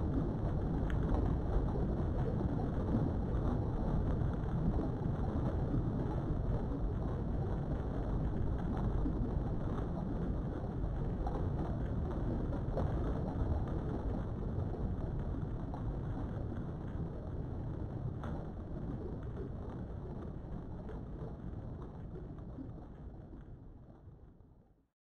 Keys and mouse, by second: 0.0 shift+click, 0.6 middle click, 1.3 shift+middle click, 3.2 KP_3, 4.0 shift+middle click, 9.1 click, 10.6 click, 11.6-13.6 drag, 17.4 click, 23.1 click.